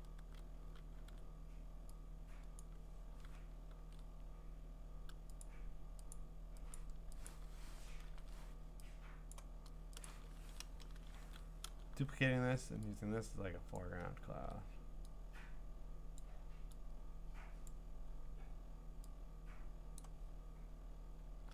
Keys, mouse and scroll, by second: 1.1 x, 2.6 click, 3.8 ctrl+z, 5.4 click, 6.1 click, 6.8 click, 7.3 click, 8.1 ctrl+j, 9.3 click, 10.0 click, 10.4 ctrl+a, 10.7 BackSpace, 11.2 ctrl+d, 13.8 click, 16.2 click, 17.7 click, 20.0 click.